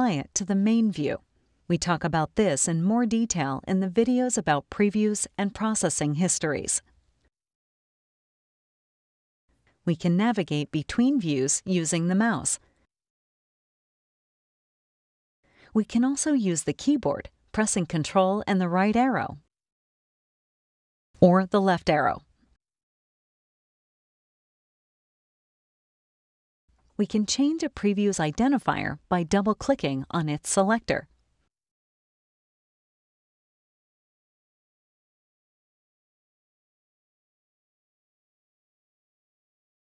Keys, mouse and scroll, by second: 0.9 click, 10.9 click, 12.0 click, 12.9 click, 14.6 click, 18.7 ctrl+Right, 21.7 ctrl+Left, 27.3 click, 29.3 scroll up 2, 29.4 click, 30.2-31.8 typing, 31.9 Return, 32.9 click, 33.5 click, 33.9-34.9 typing, 35.7 click, 36.2 click, 36.7-38.1 typing, 38.9 click, 39.3-39.8 typing.